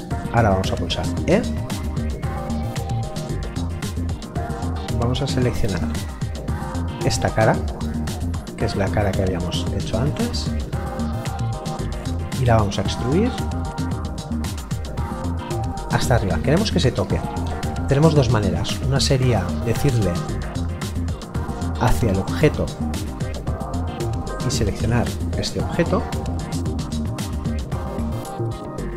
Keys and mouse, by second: 0.1 middle click, 1.0 e, 4.3 middle click, 6.6 click, 7.4 middle click, 11.2 click, 20.9 click, 23.2 middle click, 25.2 click.